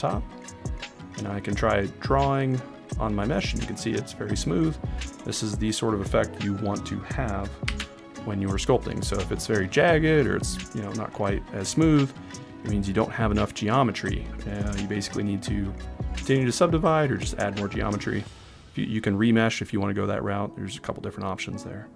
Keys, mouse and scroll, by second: 1.8 click, 7.7 ctrl+z.